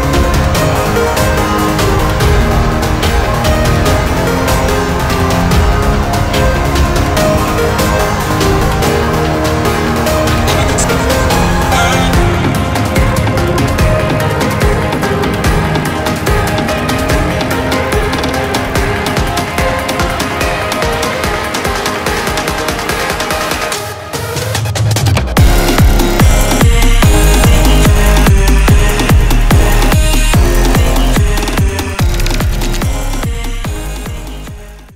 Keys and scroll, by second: 11.9 Delete, 15.4 ctrl+z, 25.2-26.1 typing.